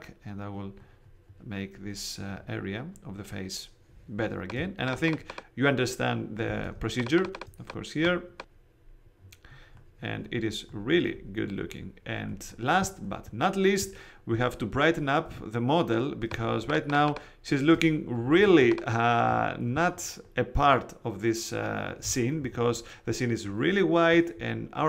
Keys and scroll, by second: 4.5 space, 16.2 space, 18.3 alt+super+space.